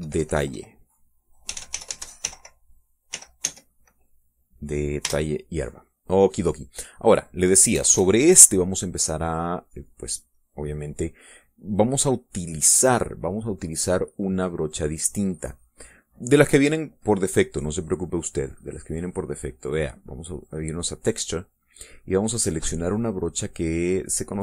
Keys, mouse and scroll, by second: 1.6-3.8 typing, 5.4 Return, 7.4 click, 8.1 KP_Add, 8.5-10.7 drag, 15.9-17.3 drag, 18.8 click, 20.4 click.